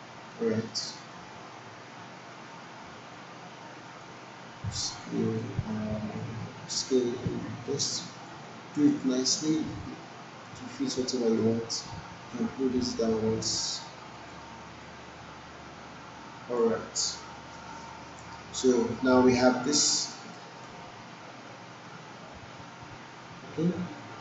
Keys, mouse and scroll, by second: 0.6 alt+middle click, 1.1-4.2 alt+drag, 8.6-9.2 alt+click, 9.3 alt+middle click, 9.7-10.6 alt+drag, 12.4-16.6 drag, 19.7-20.3 alt+click, 20.3 alt+right click, 20.7-24.2 alt+drag.